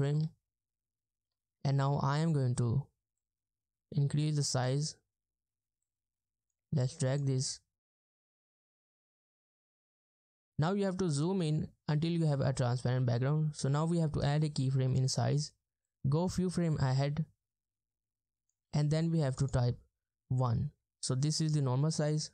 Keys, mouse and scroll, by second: 0.4-0.9 ctrl+scroll down 1, 0.9-1.4 ctrl+scroll up 1, 7.4 ctrl+scroll up 1, 7.6 ctrl+scroll down 1, 9.0 ctrl+scroll down 1, 13.5-19.4 scroll up 1, 19.4 double click, 20.7 Return.